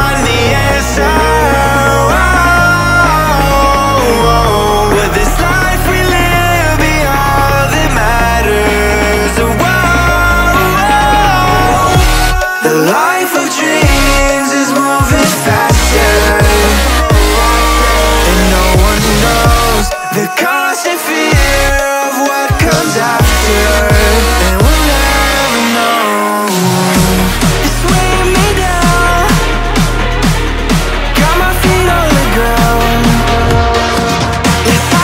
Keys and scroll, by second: 6.4-8.3 typing, 26.1 ctrl+v, 26.9 ctrl+t, 28.3 Return, 32.6 ctrl+t.